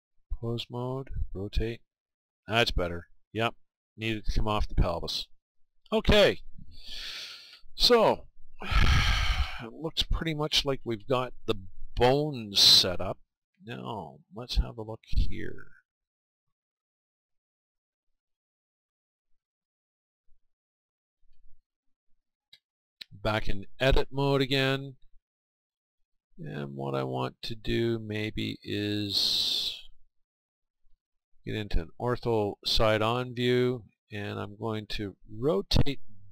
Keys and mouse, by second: 4.6-6.5 right drag, 14.8-17.2 middle drag, 19.6-21.5 right drag, 25.0-36.3 middle drag.